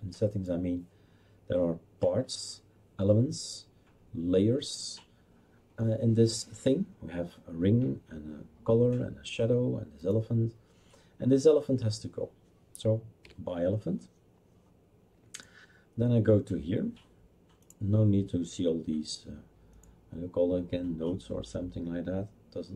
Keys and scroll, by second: 13.2 Delete.